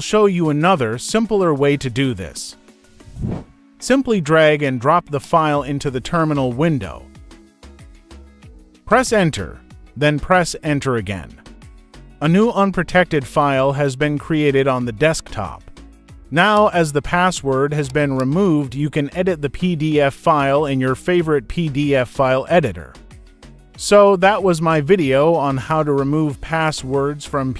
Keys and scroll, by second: 9.0 Return, 13.1 Return.